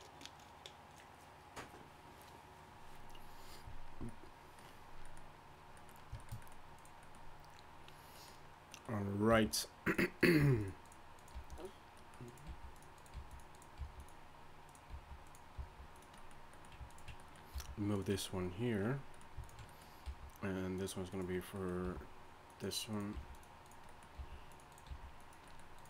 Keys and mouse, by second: 3.6-6.1 middle drag, 6.7-8.4 middle drag, 8.8 middle click, 9.3 g, 10.2 click, 10.4 g, 11.3 g, 12.1 click, 12.5 g, 13.1 g, 13.8 g, 15.6 g, 17.5 g, 20.0 g, 21.8 g, 23.1 g, 24.2 g, 24.9 g.